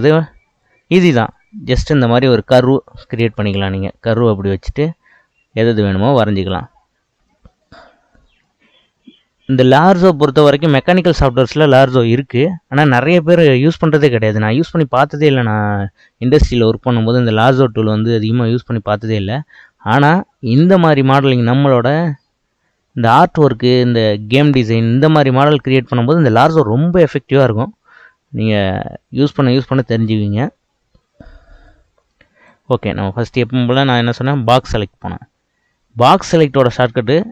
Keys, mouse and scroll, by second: 1.2 click, 7.3-10.4 middle drag, 14.7-17.8 scroll up 1, 21.9-25.1 middle drag, 32.5-35.5 drag, 36.5 click.